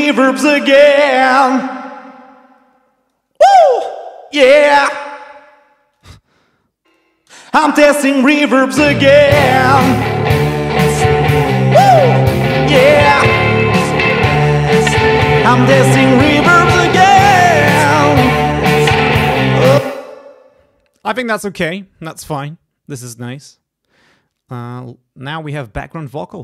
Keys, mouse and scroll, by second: 1.0 click, 2.6 click, 3.6 click, 5.8 space, 5.9 click, 6.9 click, 7.3 space, 19.8 space, 25.4 click.